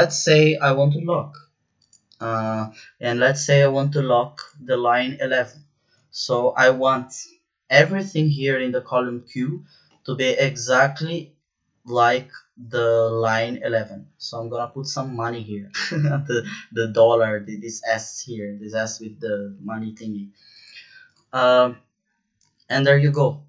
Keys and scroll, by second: 14.3 shift+4.